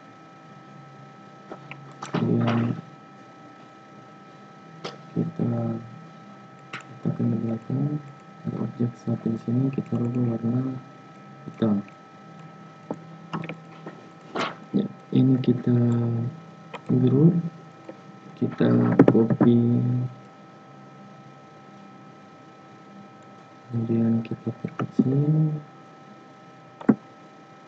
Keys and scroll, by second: 18.9 ctrl+c, 19.2 ctrl+f.